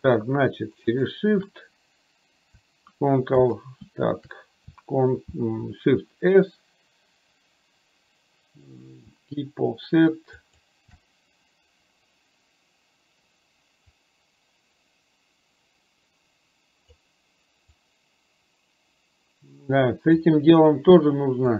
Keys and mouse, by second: 0.9 shift+right click, 3.4 shift+a, 5.4 shift+s, 14.0-17.0 drag, 18.0-20.4 drag.